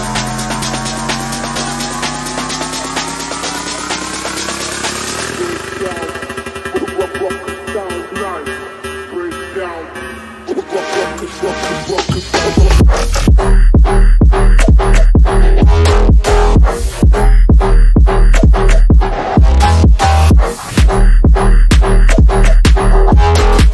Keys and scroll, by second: 9.6 F3, 10.1 Escape, 13.4 Escape, 14.3 Escape, 16.6 F3, 20.3 Escape, 21.1 F3, 23.0 F3, 23.3 shift+F2.